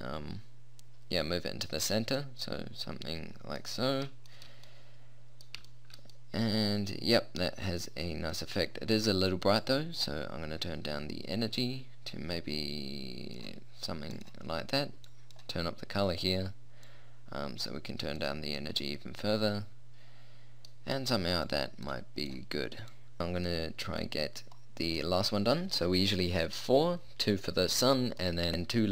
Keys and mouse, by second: 0.7 r, 2.3 click, 2.4 middle click, 4.9 middle click, 8.1-9.7 middle drag, 14.2-18.8 drag, 18.8-21.5 middle drag, 21.5-23.1 drag.